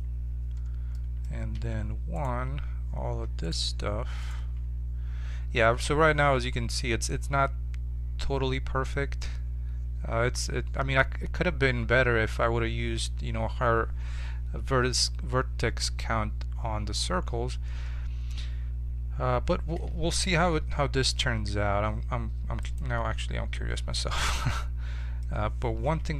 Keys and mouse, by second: 0.0 click, 0.9 right click, 1.5 1, 2.1-5.9 right drag, 5.9 z, 8.0-10.7 middle drag, 20.5 z, 21.3 z, 22.6-24.3 drag, 24.3 middle click, 25.8 KP_1.